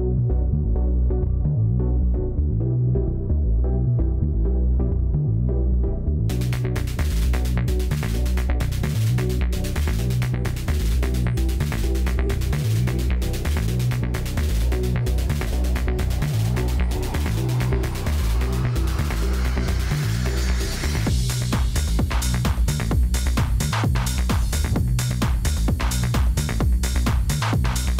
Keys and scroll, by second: 6.0 Page_Down, 10.1 Page_Down, 11.6 Page_Down, 13.2 Page_Down, 14.9 Page_Down, 27.7 Page_Down.